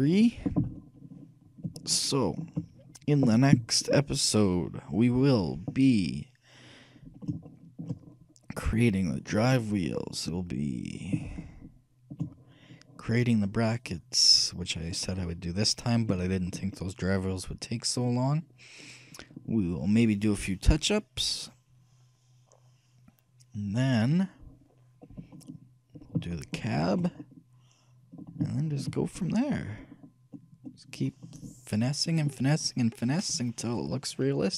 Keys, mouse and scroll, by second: 0.0-1.7 drag, 2.0-3.8 shift+middle drag, 7.7-10.5 shift+middle drag, 11.6-13.4 shift+middle drag, 14.1-31.7 shift+middle drag.